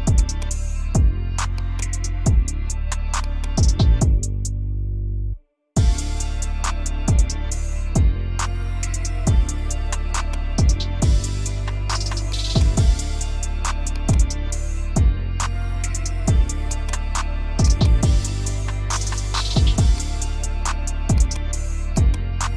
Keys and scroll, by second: 1.4 Escape, 10.5 space, 11.8 F2, 14.8 F3, 16.9 Delete, 17.7 F4, 22.1 F3.